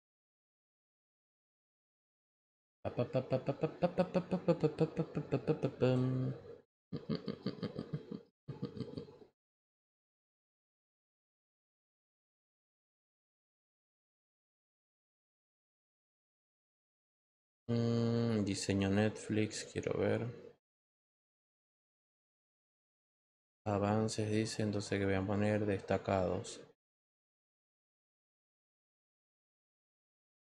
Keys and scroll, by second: 13.2 Return.